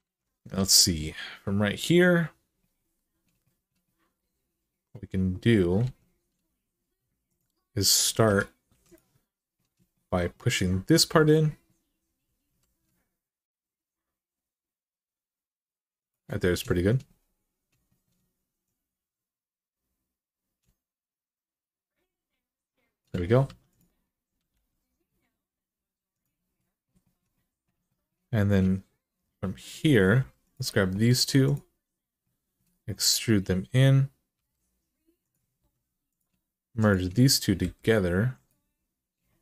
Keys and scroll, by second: 5.6 alt+z, 8.0-8.5 typing, 12.3 e, 23.2 1, 24.3 g, 29.9 2, 34.1 e, 35.4 1, 37.4 m.